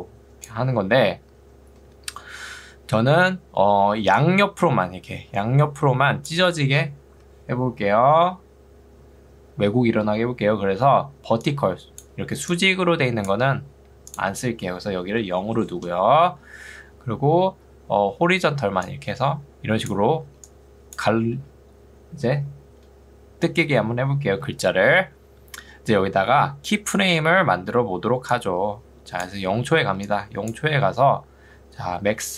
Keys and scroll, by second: 0.9 Escape, 3.9 ctrl+2, 7.1 Escape, 10.9 ctrl+2, 13.5 Escape, 15.7 Return, 20.3 ctrl+2, 24.1 Escape, 29.9 ctrl+2, 30.7 Escape.